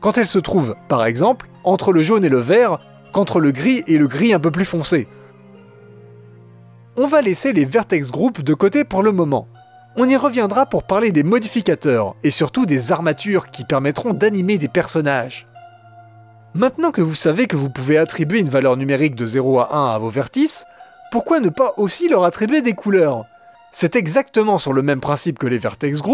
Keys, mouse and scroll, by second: 11.9-22.6 drag, 25.5 click.